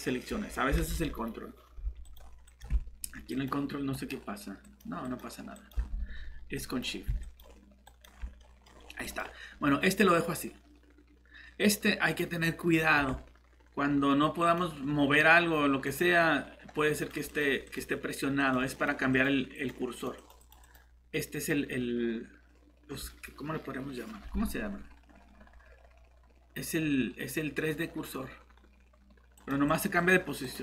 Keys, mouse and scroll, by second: 0.8 alt+Tab, 8.4 middle click, 8.7 scroll up 1, 9.0 middle click, 14.5 click.